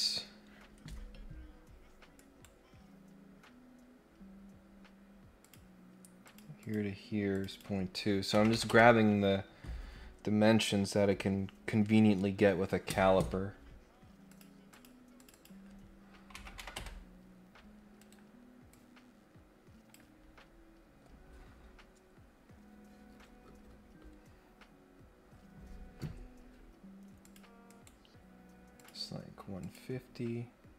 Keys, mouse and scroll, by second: 2.1 right click, 5.4 click, 6.2 click, 6.6 click, 7.3 click, 14.2 click, 14.7 click, 15.2 click, 17.9 Escape, 18.7-19.9 drag, 27.2 click, 27.6 right click, 28.7 click, 29.5 click.